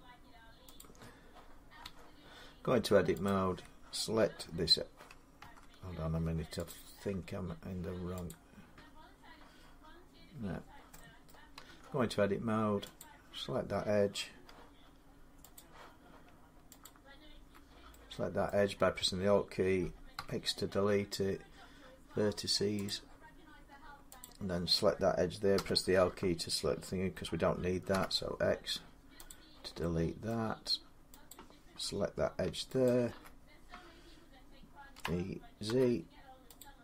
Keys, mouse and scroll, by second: 0.6 click, 1.6 Tab, 3.1 click, 6.5 click, 6.9 Tab, 8.1 click, 10.4-10.9 scroll, 11.1 middle click, 11.5 Tab, 11.5 scroll down 3, 12.8 click, 15.3 click, 15.5 middle click, 16.6 alt+click, 18.3 middle click, 19.9 x, 22.7 click, 24.0 click, 25.3 i, 27.7 x, 29.1 click, 30.1 middle click, 31.1 click, 32.7 alt+click, 34.7-35.5 typing, 36.4 click.